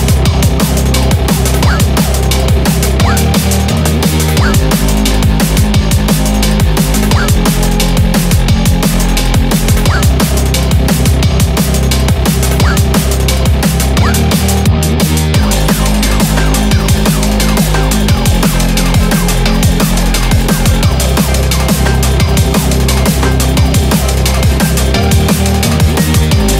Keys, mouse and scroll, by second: 8.7 scroll down 2, 8.8 middle click, 9.5-9.8 scroll up 5, 9.8 middle click, 10.4 KP_7, 11.0 scroll up 1, 11.2-11.8 scroll down 6, 13.9-14.8 scroll up 6, 14.1 shift+middle click, 14.8-15.1 scroll down 3, 15.5 scroll down 7, 15.7 middle click, 15.7 scroll up 1, 15.9 scroll down 2, 16.1-16.7 scroll up 3, 16.3 middle click, 16.6 middle click, 17.0 click, 17.8 Tab, 18.0-18.7 scroll up 4, 18.7 middle click, 19.7 ctrl+r.